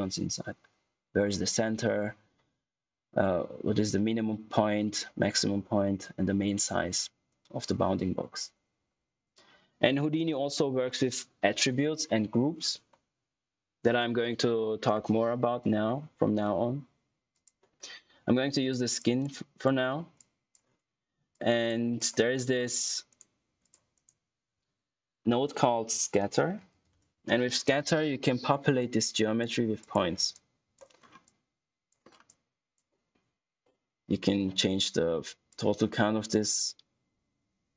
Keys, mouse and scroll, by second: 17.2 click, 17.9 scroll down 1, 18.6 click, 19.8 scroll up 1, 20.1 click, 22.3 middle click, 23.0 right click, 23.5 click, 23.9 right click, 25.6-27.1 typing, 27.5 click, 30.9 scroll up 1, 31.3 click, 32.0 scroll down 1, 32.2 click, 35.4 click.